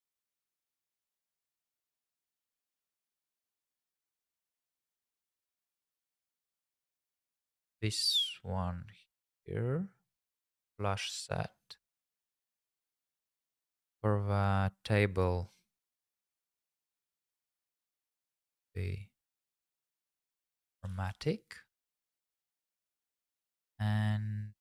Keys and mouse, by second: 5.9 click, 8.0 shift+middle click, 8.3 middle click, 11.9 middle click, 12.4 shift+middle click, 13.1 click, 20.7 g, 20.9 shift+z, 21.7 click, 22.6 click, 23.1 middle click.